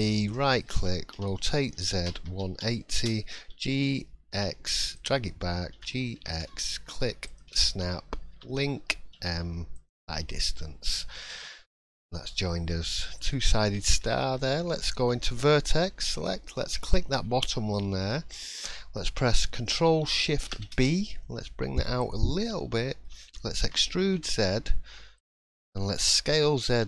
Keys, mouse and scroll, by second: 1.1 r, 8.3 l, 10.3 middle click, 13.2-13.8 scroll up 4, 13.8 shift+middle click, 14.4-14.7 scroll up 1, 15.1 1, 16.1 click, 16.5 middle click, 17.2 scroll down 4, 17.6-18.1 scroll up 3, 18.0 middle click, 20.4 ctrl+shift+b, 22.3 middle click, 23.6 e.